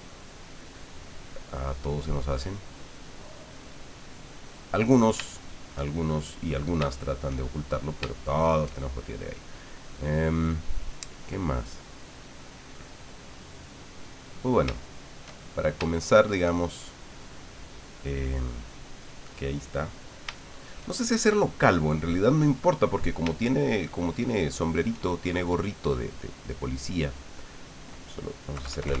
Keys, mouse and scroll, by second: 0.1 ctrl+click, 0.5 ctrl+click, 1.0 ctrl+click, 2.5 ctrl+click, 3.3 ctrl+click, 5.3 ctrl+shift+middle click, 6.0 shift+click, 6.9 shift+click, 7.4 shift+middle click, 7.5 shift+click, 8.0 shift+click, 13.4 click, 14.6 shift+click, 14.8 shift+click, 15.9 shift+middle click, 18.4-20.2 drag, 20.4-23.1 shift+middle drag, 23.4-25.0 shift+drag, 26.4 click, 28.5 KP_Add.